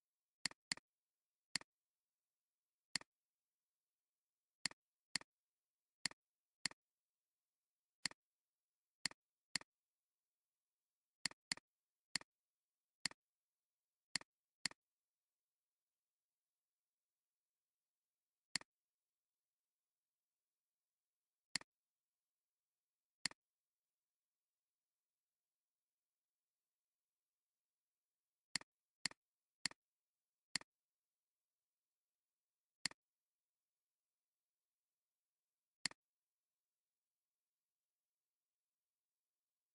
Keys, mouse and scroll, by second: 0.6 double click, 5.0 space, 6.7 right click, 9.0 shift+click, 9.5 right click, 11.5 double click, 12.7 alt+scroll up 1, 13.0 space, 14.5 space, 18.5 right click, 23.0-26.6 drag, 29.4 alt+scroll down 1, 29.6 space, 30.2 alt+scroll down 1, 33.0 space, 36.0-36.6 alt+scroll down 1.